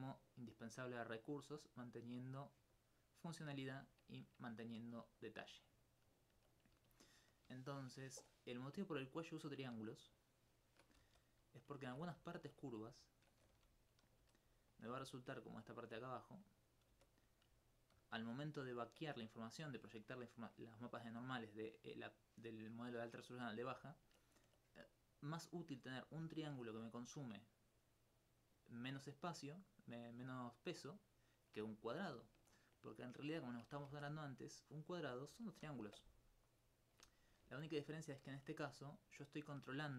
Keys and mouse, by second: 3.2-5.6 middle drag, 5.6 middle click, 9.0 right click, 9.9 shift+right click, 10.6 shift+right click, 11.0 shift+e, 11.8 ctrl+z, 12.2 alt+click, 12.8 right click, 13.1 shift+right click, 14.1 click, 14.2 click, 14.7 click, 15.1 click, 15.4 alt+click, 16.6 right click, 16.9 right click, 17.4 click, 17.6 alt+click, 17.8 alt+click, 19.8 alt+click, 26.1 alt+click, 26.2 alt+click, 33.9 ctrl+Tab, 34.4 click, 34.8 right click, 38.8 alt+click.